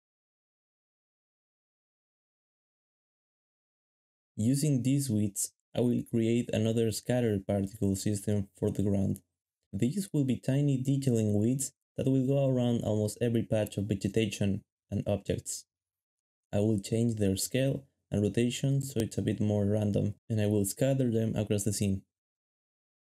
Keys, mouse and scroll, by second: 1.8-3.1 typing, 4.1 2, 6.0 shift+click, 6.5 shift+click, 6.9 shift+middle click, 9.1 shift+middle click, 10.9 typing, 12.0 Escape, 12.8 Caps_Lock, 12.9 typing, 14.5 shift+click, 15.7 shift+click, 21.2 shift+middle click.